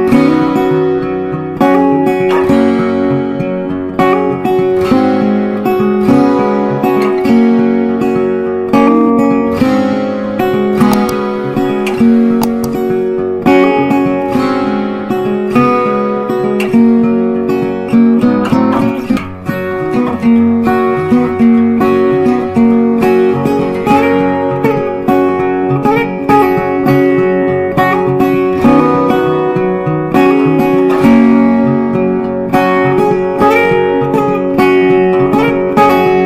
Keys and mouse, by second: 4.4 right click, 5.5 click, 10.6 click, 10.6-24.3 drag, 24.4-26.6 drag, 26.6 right click, 28.7 click, 30.6 click, 31.6 g, 33.0 click, 33.3-36.2 drag.